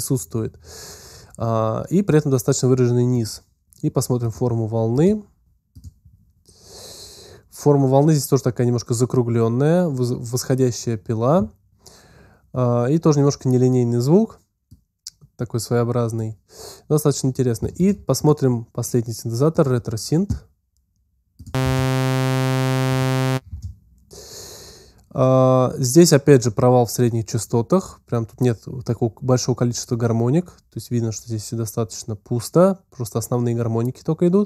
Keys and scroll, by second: 21.5 space.